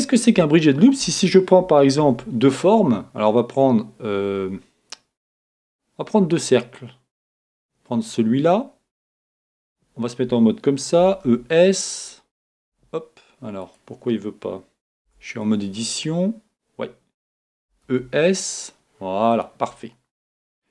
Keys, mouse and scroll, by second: 2.1 shift+a, 7.3-9.2 drag, 9.6 Tab, 11.0 e, 11.2 s, 11.9 e, 11.9 s, 13.6-15.4 right drag, 15.0 Tab, 17.6 e, 19.4-20.7 drag, 19.8-20.7 middle drag.